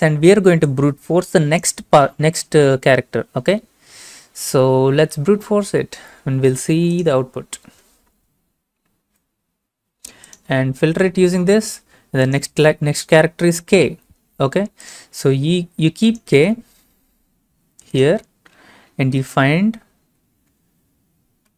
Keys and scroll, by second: 21.3 k.